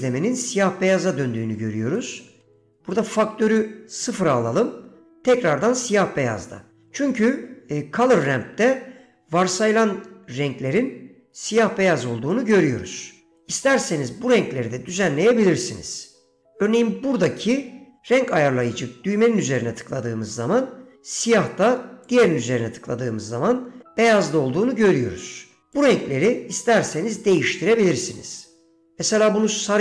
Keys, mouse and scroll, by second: 2.1 middle click, 3.1-3.8 drag, 6.9 middle click, 14.1 click, 22.2 click, 25.9 click.